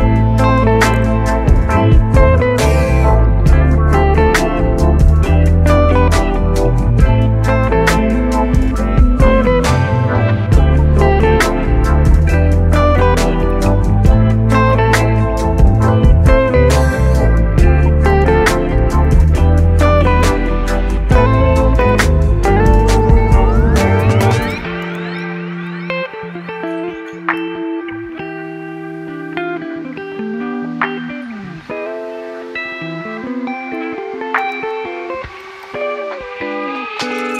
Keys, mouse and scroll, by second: 4.6 click, 5.2 click, 5.7-8.7 middle drag, 8.9 click, 11.8-12.9 middle drag, 12.9 click, 13.4-15.9 middle drag, 15.9 scroll down 2, 15.9 shift+a, 16.9-17.9 scroll down 2, 21.7 click, 22.4-25.8 drag, 26.0-28.7 drag, 32.5-33.6 middle drag, 33.6 s, 33.9-34.6 scroll up 2, 34.6 Tab, 35.5 1, 36.9-37.3 middle drag.